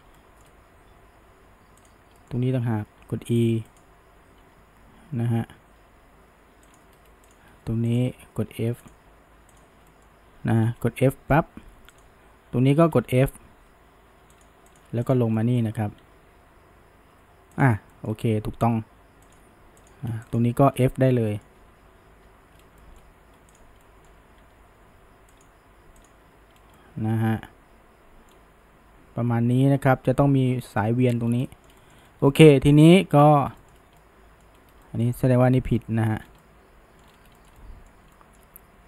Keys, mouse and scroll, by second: 0.2-1.8 shift+middle drag, 1.8 click, 2.2 middle click, 3.0 g, 4.4 e, 7.3 click, 7.9 shift+click, 8.9 drag, 9.6 shift+drag, 9.9-10.7 middle drag, 10.7 f, 11.2-12.0 middle drag, 12.0 click, 13.0 f, 14.7 drag, 15.1 shift+click, 15.4-16.0 shift+middle drag, 16.0 f, 17.6 click, 17.9 middle click, 18.4 g, 19.8 click, 20.3 shift+click, 21.3-21.7 middle drag, 21.7 f, 22.3 f, 22.6 scroll down 1, 22.8-23.6 shift+middle drag, 23.6 click, 23.8 middle click, 24.4 g, 26.0 click, 26.6 scroll down 1, 26.8-29.8 middle drag, 31.3 scroll down 2, 31.5-32.0 shift+middle drag, 32.0 scroll up 1, 32.3-32.7 shift+middle drag, 32.7-33.0 scroll down 2, 33.0-33.4 middle drag, 33.4 scroll up 1, 34.0-34.6 middle drag, 34.6 scroll up 1, 34.9-36.2 shift+middle drag, 36.2 scroll down 1, 36.4-37.1 middle drag, 37.1-37.4 scroll up 1, 37.4-38.8 shift+middle drag.